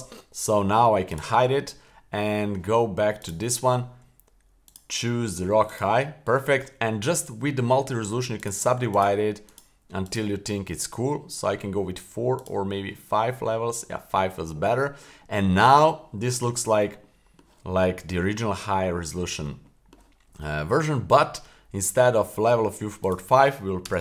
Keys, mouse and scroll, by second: 1.1 click, 3.2 click, 4.6-5.8 drag, 8.4 click, 8.9 click, 9.5 click, 10.0 click, 12.4 click, 13.3 middle click, 14.0-14.6 middle drag, 15.2-15.7 middle drag, 16.0-16.3 middle drag, 16.5-16.8 middle drag, 17.0-17.4 middle drag, 18.7-19.4 middle drag, 19.6 middle click, 23.0-24.0 drag.